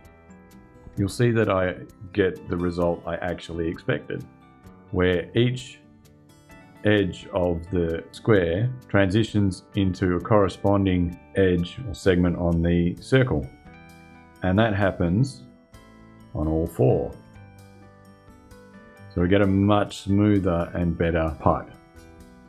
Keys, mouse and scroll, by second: 13.1 click, 13.6-15.7 shift+scroll up 2.